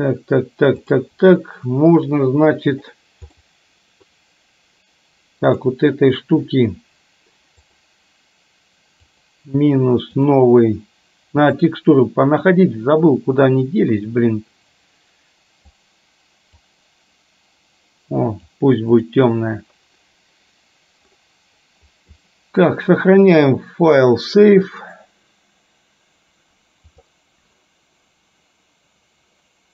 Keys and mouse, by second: 1.4-2.6 middle drag, 3.5 middle click, 9.1 click, 10.2 click, 11.5 click, 18.9 click, 22.2 middle click.